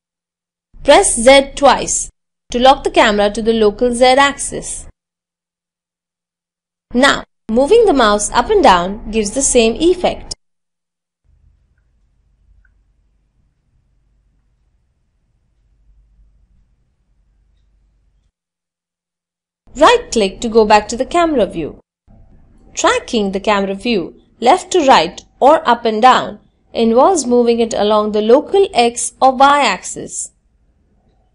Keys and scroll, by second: 30.4 g, 30.4 x.